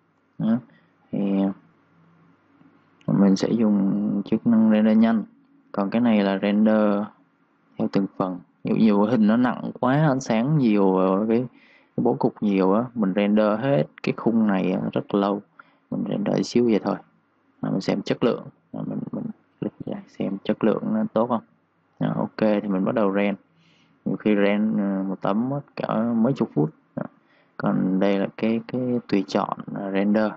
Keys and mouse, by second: 0.7 v, 1.6 click, 5.9 click, 16.2 click, 27.2 click.